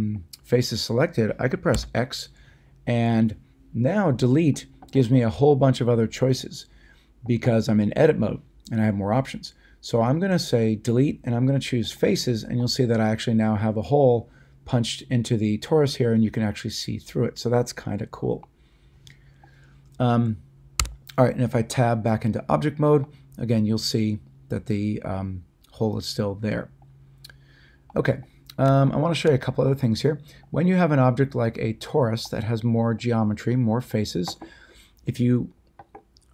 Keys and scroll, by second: 1.7 x, 20.8 Tab.